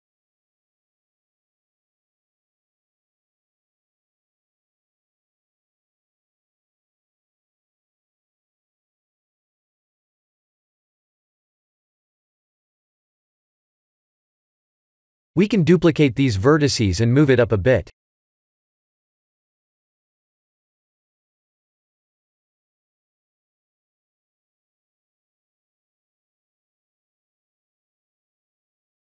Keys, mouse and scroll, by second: 0.1 scroll down 3, 0.5 middle click, 1.7 click, 2.0 middle click, 3.1 click, 3.4 Tab, 3.8 scroll up 1, 4.5 shift+middle click, 4.5 scroll up 2, 7.1 alt+click, 8.2 middle click, 11.4 click, 11.7-13.0 scroll down 2, 13.0-13.9 scroll down 1, 13.0 KP_3, 13.9 scroll down 2, 14.2 middle click, 16.9 middle click, 17.9 shift+d, 22.1 scroll up 5, 22.5 middle click, 24.3 middle click, 25.8 scroll down 2, 27.2 scroll down 1, 27.3 middle click.